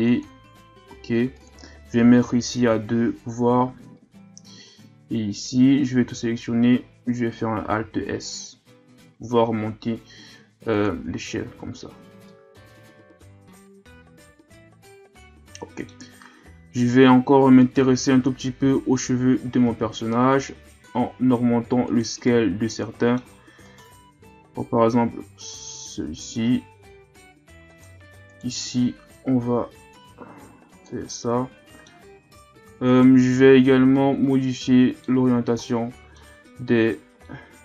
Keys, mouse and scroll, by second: 0.0 click, 1.3-4.1 drag, 4.1 Tab, 6.0 a, 6.3 a, 7.8 alt+s, 11.1 Tab, 11.4 a, 11.7-12.3 scroll down 2, 12.3-15.3 middle drag, 16.2-16.9 scroll up 6, 16.9 Tab, 17.6 right click, 18.6 l, 19.7 alt+s, 22.3-23.6 middle drag, 23.6 right click, 24.2 alt+s, 28.3 right click, 29.2 l, 29.9-31.1 drag, 31.1-32.9 middle drag, 32.9 right click, 33.4-37.6 middle drag.